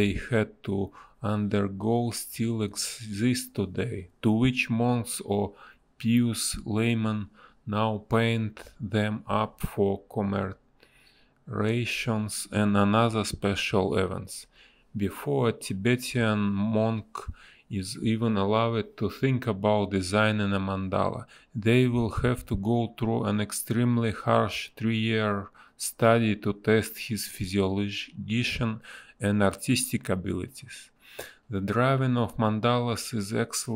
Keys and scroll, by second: 1.9 ctrl+z, 4.1 a, 4.5 Delete, 5.1 b, 7.3 a, 13.1 b, 14.7 ctrl+z, 17.1 ctrl+z, 19.3 ctrl+z, 23.7 space, 24.0 ctrl+z, 24.2 space, 25.4 ctrl+z, 26.7 ctrl+z, 28.2 ctrl+z, 31.2 ctrl+z.